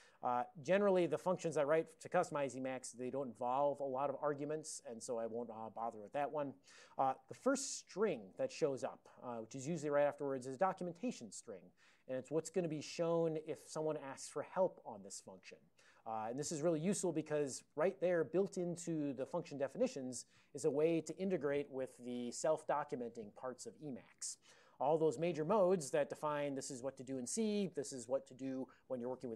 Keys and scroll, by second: 5.5 alt+BackSpace, 5.9 alt+BackSpace, 7.0 ctrl+a, 7.4 ctrl+n, 9.4 ctrl+p, 9.9 ctrl+n, 17.8 ctrl+p, 18.1 alt+f.